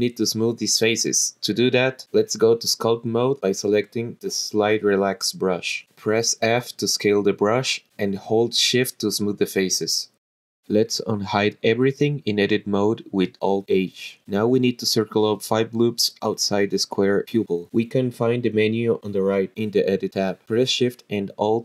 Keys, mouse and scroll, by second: 0.0 click, 0.1 l, 0.5 h, 1.6-2.7 drag, 5.4 click, 5.8 f, 7.2-7.6 scroll down 3, 9.2 shift+click, 11.2-11.8 drag, 13.5 alt+h, 16.0 click, 18.6 click, 20.2 click, 21.2 click.